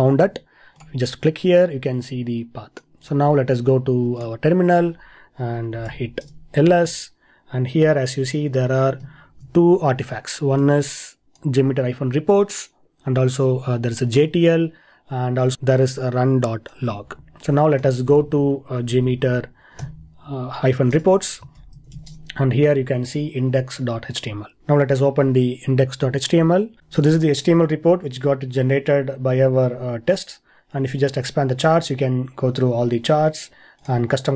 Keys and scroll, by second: 9.3 ctrl+e, 21.6 ctrl+l, 24.6 ctrl+l, 26.8 super++.